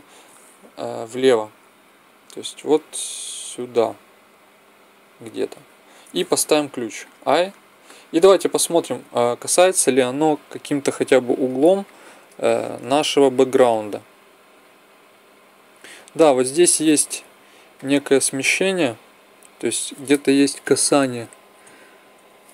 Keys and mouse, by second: 0.9 KP_0, 2.7-4.4 drag, 6.4 i, 11.8 middle click, 14.6-16.5 middle drag, 20.6 Left, 21.6 Right, 22.1 Right.